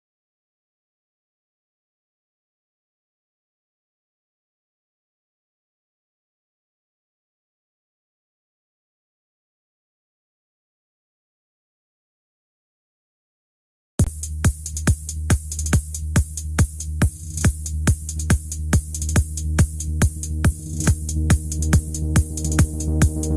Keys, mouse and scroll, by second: 4.1 click, 5.9 click, 6.3-6.7 scroll down 1, 7.0 click.